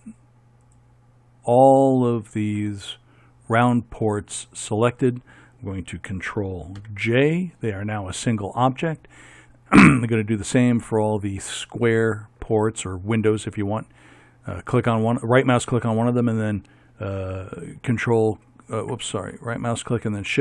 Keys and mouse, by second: 0.8-5.0 right drag, 6.9 ctrl+j, 12.0-14.2 right drag, 18.2-20.4 right drag.